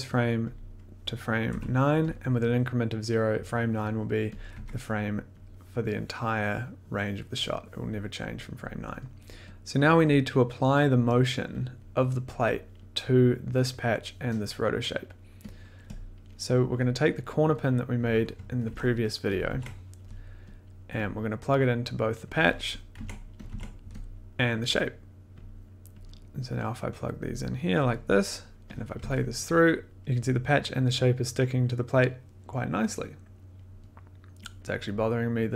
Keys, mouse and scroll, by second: 0.5 click, 1.4 9, 2.0 click, 4.3 click, 4.5 1, 5.4 click, 9.4 click, 9.4 scroll, 11.5 click, 14.5 middle click, 15.6 click, 16.0 click, 16.0 middle click, 16.4 middle click, 16.8 middle click, 17.9 click, 18.6 ctrl+c, 18.9 middle click, 19.3 click, 19.4 ctrl+v, 20.6 click, 20.6 middle click, 21.1 click, 21.9 click, 22.3 click, 22.9 ctrl+c, 23.5 ctrl+v, 23.5 ctrl+click, 24.1 scroll, 24.3 click, 24.9 click, 25.4 click, 26.3 click, 27.2 click, 28.2 click, 28.8 click, 29.0 1, 29.8 click, 34.4 click.